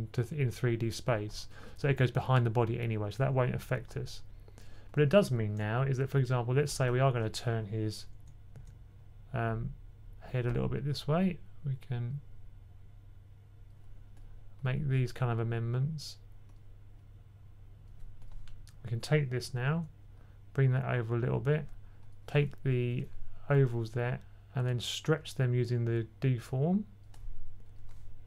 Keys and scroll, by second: 8.1-8.4 typing, 19.5 b, 19.6 b.